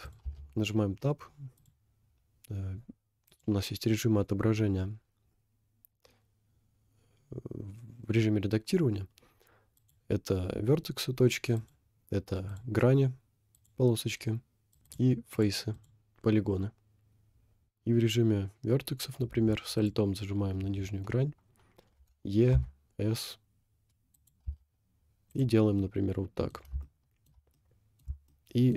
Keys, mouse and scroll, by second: 0.3 Tab, 1.6 click, 3.3 click, 9.8 click, 11.6 click, 12.5 click, 13.6 click, 14.7 click, 15.3 click, 15.7 click, 17.6 click, 19.8 alt+click, 22.0 e, 24.5 Tab, 25.0 scroll down 1, 25.3 click, 25.8 middle click, 26.9 shift+middle click, 27.6 middle click, 28.3 shift+middle click.